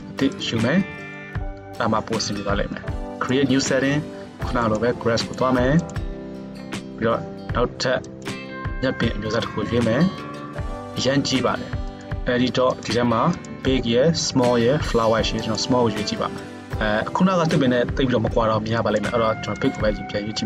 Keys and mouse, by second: 0.1 middle click, 0.4 click, 0.5-1.0 middle drag, 1.0-12.9 drag, 12.9-13.4 middle drag, 13.4-20.4 drag.